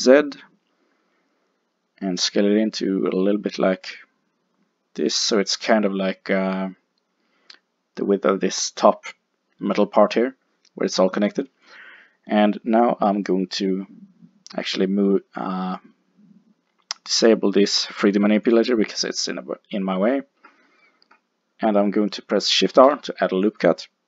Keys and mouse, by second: 5.4-7.1 drag, 12.2-15.1 middle drag, 18.5 click, 22.7 ctrl+r.